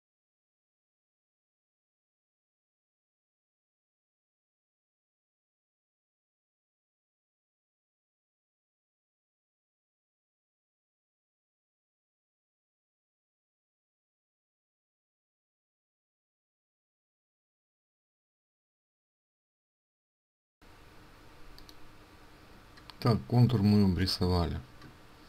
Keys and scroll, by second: 10.2 ctrl+alt+z, 10.3 ctrl+alt+z, 10.9 ctrl+z.